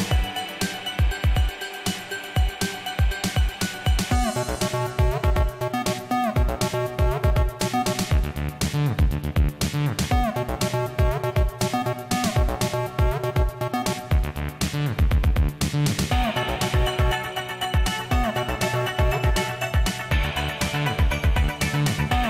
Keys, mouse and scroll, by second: 9.4 click, 17.6 click, 21.6 click, 21.7 right click.